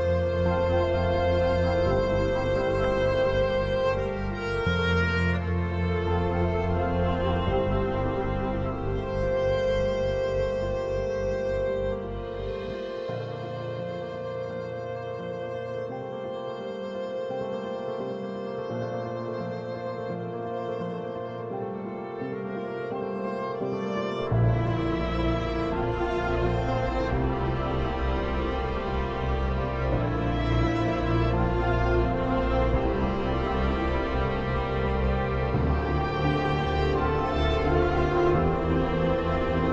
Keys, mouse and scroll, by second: 0.9 ctrl+r, 3.7 ctrl+r, 6.0-13.3 shift+drag, 13.3 Escape, 13.9-15.7 drag, 15.7-18.5 drag, 18.5 Escape, 19.5 click, 22.5 shift+click, 23.4 Escape, 23.8-29.6 drag, 29.6 ctrl+shift+right click, 32.2 click, 36.6 c, 37.2 Escape, 38.0-39.6 drag, 39.6 ctrl+z.